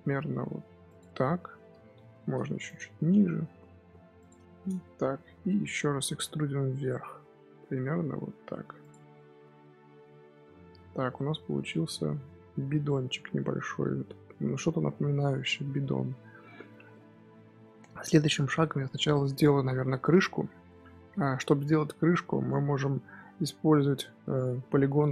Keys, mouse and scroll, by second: 1.0 middle click, 1.8 g, 3.0 s, 4.5-6.1 shift+middle drag, 6.1 e, 9.0 middle click, 9.6 scroll down 4, 9.7-12.2 middle drag, 12.2-13.0 scroll up 3, 13.0 middle click, 14.0-16.3 scroll up 2, 16.3 3, 16.8-19.9 middle drag, 21.5-22.0 scroll down 1, 22.0-24.4 middle drag, 24.4-25.1 scroll up 1.